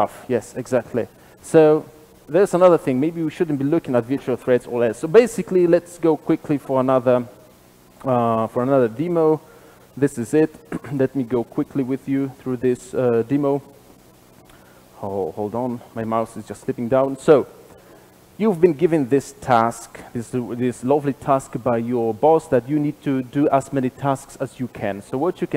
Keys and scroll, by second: 15.6 shift+F12.